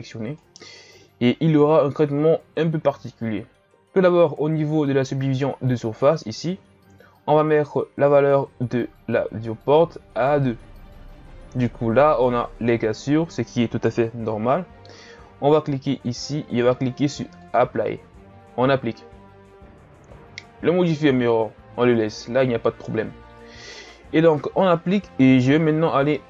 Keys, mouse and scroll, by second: 6.0-9.1 drag, 10.1-12.3 drag, 12.3-15.5 scroll up 2, 15.9-19.0 drag.